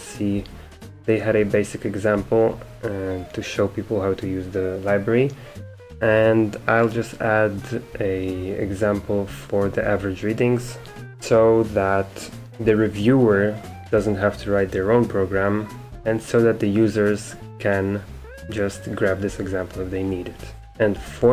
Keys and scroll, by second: 0.0 Return, 0.0 typing.